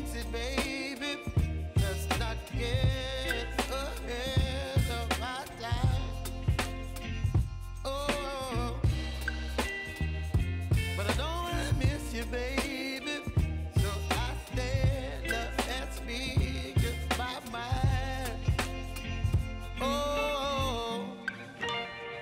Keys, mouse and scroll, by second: 0.8 shift+e, 15.2 click, 17.4 ctrl+a, 17.9-22.2 drag, 21.7-22.2 shift+drag.